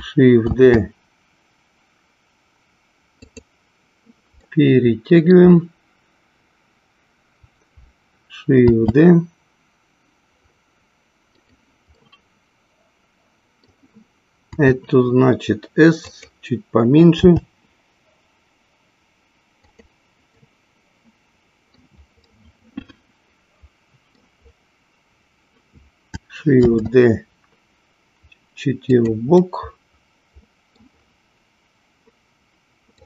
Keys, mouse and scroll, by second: 0.6 shift+d, 3.5 click, 4.6 middle click, 8.7 shift+d, 11.7 click, 12.1-14.0 middle drag, 14.7 s, 16.3 click, 17.4 g, 19.9 click, 20.9-22.2 middle drag, 22.6-24.4 middle drag, 26.7 shift+d, 29.1 click, 29.6-31.1 middle drag.